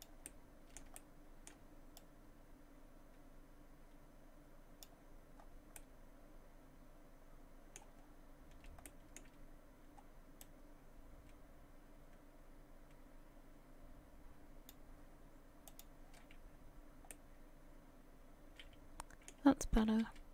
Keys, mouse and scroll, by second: 15.7 click, 17.1 middle click, 19.8 a, 20.0 a.